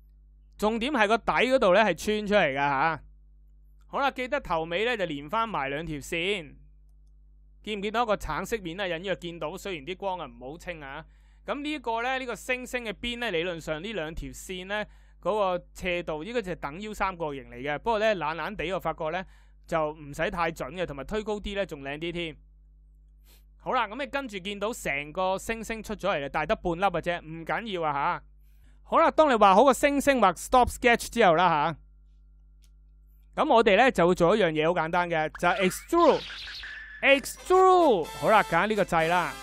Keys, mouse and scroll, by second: 35.2 e.